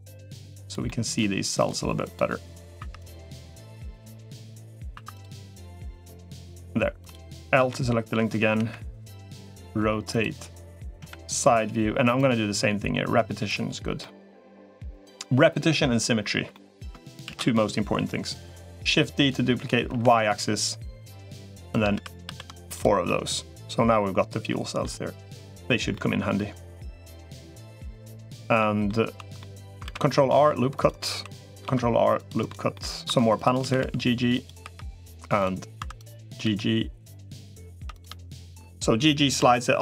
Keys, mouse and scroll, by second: 0.7 middle click, 0.7 ,, 2.7 3, 3.5-4.7 drag, 4.9 click, 4.9 2, 5.5-6.5 drag, 7.5 l, 8.3 KP_1, 9.3 r, 10.9 KP_3, 12.1-13.3 drag, 13.8-14.9 middle drag, 16.3 middle click, 17.1 shift+d, 21.7 shift+r, 22.1 shift+r, 22.5 click, 22.8-24.6 middle drag, 25.1 click, 25.7-27.2 middle drag, 27.7 middle click, 28.4 middle click, 28.9 2, 29.2 middle click, 29.7 ctrl+r, 31.1 3, 31.5 ctrl+r, 32.5 middle click, 32.9 2, 33.1 click, 33.5 g, 34.5 3, 35.7 2, 36.1 g, 37.7 click, 37.7 3, 39.3 1.